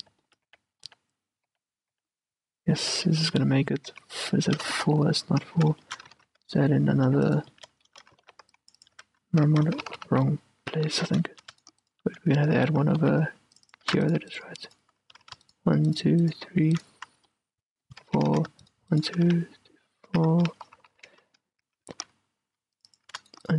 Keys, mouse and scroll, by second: 0.0-3.0 typing, 0.7 middle click, 4.3 f, 4.3 a, 4.9 ctrl+z, 5.0 ctrl+z, 5.7 a, 6.2-8.4 middle drag, 6.3 ctrl+r, 8.3 ctrl+r, 8.4-10.1 drag, 9.1 a, 10.1 ctrl+z, 10.3 ctrl+z, 11.7-13.8 right drag, 12.7 a, 13.1 ctrl+r, 14.0 a, 14.2-17.4 right drag, 15.4 a, 17.4-19.4 middle drag, 18.2 f, 18.4 a, 19.4-20.9 right drag, 19.4 f, 20.2 a, 20.9 ctrl+z, 21.0 ctrl+z, 21.2-23.0 middle drag, 21.7 a, 22.1 ctrl+r, 23.0-23.5 drag, 23.2 a, 23.3-23.5 right drag.